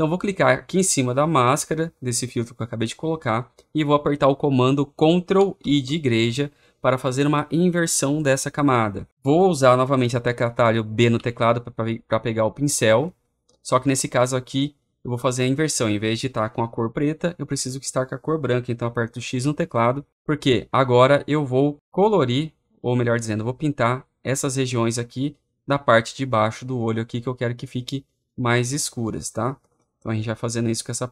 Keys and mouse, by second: 5.2-6.3 drag, 5.4 ctrl+i, 11.0 b, 19.2 x, 22.1-23.2 drag, 23.4-25.1 drag, 25.9-27.0 drag, 27.1-29.1 drag.